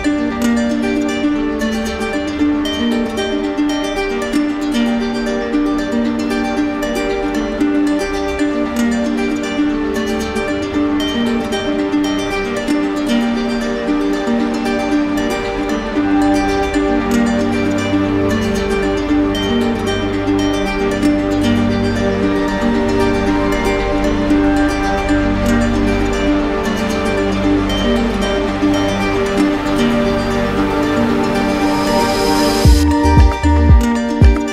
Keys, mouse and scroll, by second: 0.8 right click, 2.3 right click, 2.9 shift+right click, 3.2 shift+right click, 3.4 right click, 3.7 right click, 3.9 shift+right click, 5.0 right click, 5.2 ctrl+d, 6.4 ctrl+d, 7.6 right click, 8.6 click, 9.4 right click, 11.2 right click, 11.7 right click, 12.8 click, 14.2 click, 15.1 ctrl+z, 15.5 ctrl+z, 16.5-17.6 right drag, 18.1-19.2 right drag, 21.1-22.2 drag, 22.9-24.2 drag, 24.2 right click, 25.3 right click, 28.9 alt+right click, 29.4 shift+right click, 31.3 right click, 32.5-33.6 alt+right drag, 34.1-34.5 drag.